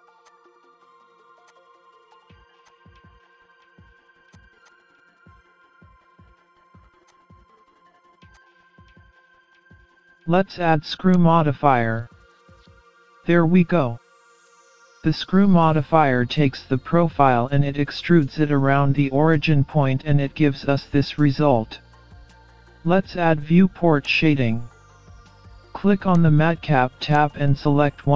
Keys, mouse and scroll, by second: 0.2 click, 0.6 ctrl+shift+b, 1.6 scroll down 2, 1.7-2.1 scroll up 3, 2.1 scroll down 2, 2.2 scroll up 2, 2.6 click, 3.1 ctrl+shift+b, 4.6 click, 5.0 ctrl+shift+b, 7.5-7.9 scroll down 12, 7.9 scroll up 3, 8.3 click, 8.6 scroll down 1, 9.5 Tab, 9.8 click, 12.7 scroll up 2, 13.2 middle click, 16.2-16.7 scroll down 4, 16.7-17.3 scroll up 1, 17.3 middle click, 17.3 scroll up 2, 20.9 middle click, 24.1 click, 26.1 click.